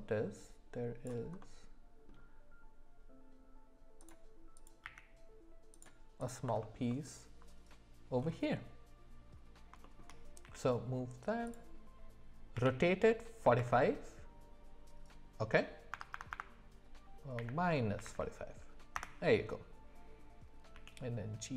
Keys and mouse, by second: 0.2-4.1 drag, 1.4-4.1 middle drag, 4.6 click, 4.8 q, 6.2 click, 6.6 alt+middle click, 6.9 alt+middle click, 9.8 shift+middle click, 10.4 g, 12.5 r, 20.7 g.